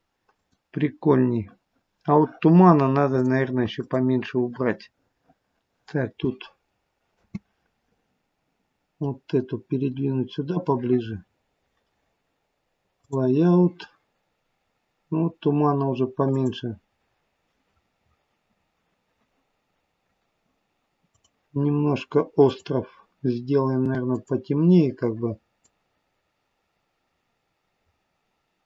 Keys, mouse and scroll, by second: 0.3 click, 13.3 click, 14.5 scroll up 2, 16.1 click, 17.1 scroll down 2, 21.2 click, 22.3 click.